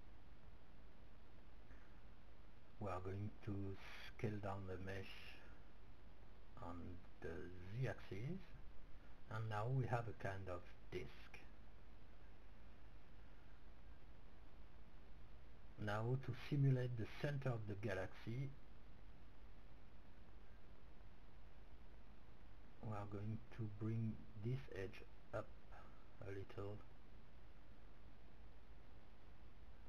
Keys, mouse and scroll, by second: 1.7 Tab, 2.9 s, 8.9-10.9 drag, 10.0-13.7 middle drag, 12.4 Tab, 15.2-17.3 drag, 23.5-26.3 middle drag, 24.5-26.6 right drag, 26.6-27.9 middle drag, 29.2-29.8 drag.